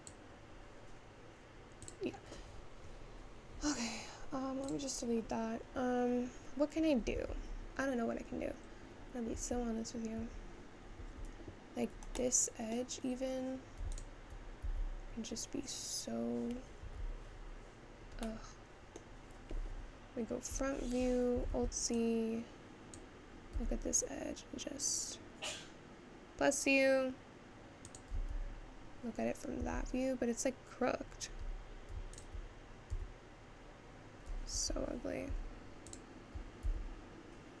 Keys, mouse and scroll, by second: 3.0-4.9 scroll up 1, 4.9 click, 5.4-5.8 scroll down 2, 5.8-6.2 scroll up 3, 6.2-7.2 scroll down 2, 7.2 Tab, 7.6-8.4 scroll down 3, 8.4-9.0 scroll up 3, 9.4 Tab, 10.2 Tab, 12.4-14.0 middle drag, 14.0 alt+click, 14.7 s, 18.3-20.5 middle drag, 21.6 alt+z, 22.9 click, 23.6 s, 28.2 Tab, 29.7 Tab, 32.2 alt+click, 33.0 s, 35.9 alt+click, 36.7 s.